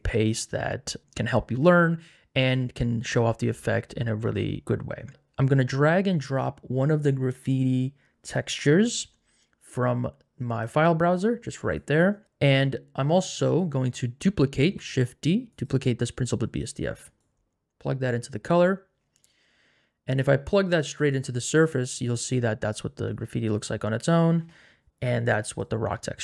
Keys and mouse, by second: 13.5 click, 14.6 shift+d, 15.5 click, 17.2 click, 20.2 click, 24.1 click.